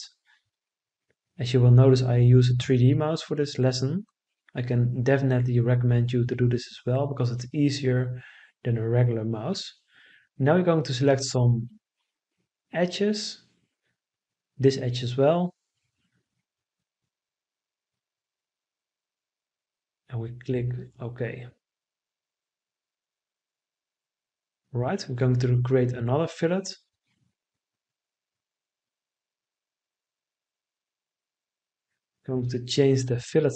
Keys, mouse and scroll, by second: 31.3 1, 31.9 0.